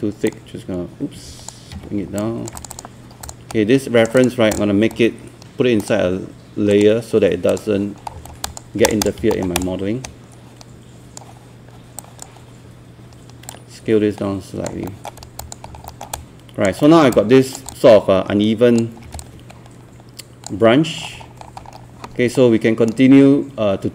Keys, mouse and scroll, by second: 0.3-1.8 drag, 1.8 z, 2.2 alt+click, 3.5 right click, 4.2 click, 8.4 alt+click, 8.8 click, 9.3 alt+middle click, 9.6 click, 10.0-11.8 right drag, 12.3 click, 14.9 alt+middle click, 15.4 alt+click, 15.7 scroll down 1, 15.9 alt+middle click, 16.2 alt+click, 16.8 alt+middle click, 17.1 alt+click, 17.7 alt+click, 19.2 click, 21.0 scroll up 1, 22.4 right click.